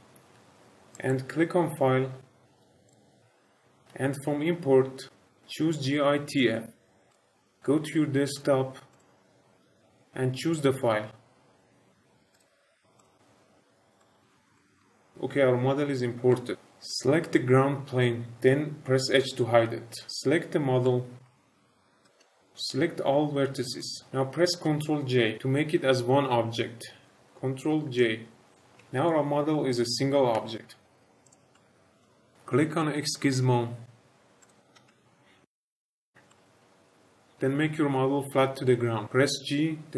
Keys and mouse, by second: 0.9-2.6 drag, 2.8-7.1 drag, 13.9 shift+middle click, 14.3 shift+middle click, 14.5 middle drag, 14.7 shift+middle click, 16.3 shift+middle drag, 20.0 h, 20.8-21.2 shift+middle drag, 22.0-23.7 drag, 27.8 ctrl+j, 30.3 g, 31.5-32.0 middle drag, 34.3 click, 35.4 shift+middle drag, 36.2 shift+middle drag, 36.5 shift+middle drag, 39.0 g.